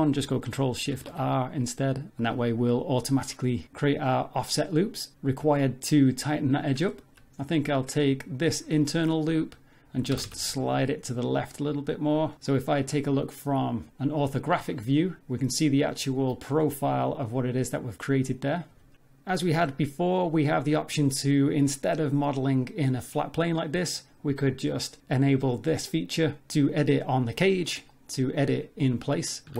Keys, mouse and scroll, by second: 0.9 ctrl+shift+r, 6.2 middle click, 6.6-6.9 scroll down 2, 6.9 shift+middle click, 7.3 middle click, 7.6-8.1 scroll up 2, 8.3 alt+click, 8.7 middle click, 10.1 g, 12.5 middle click, 13.9 z, 14.6 Tab, 15.2 Tab, 15.2 a, 17.9 Tab, 18.0 middle click, 18.4 z, 18.6 scroll down 3, 18.7 middle click, 24.7 click, 27.9 middle click, 29.5 3.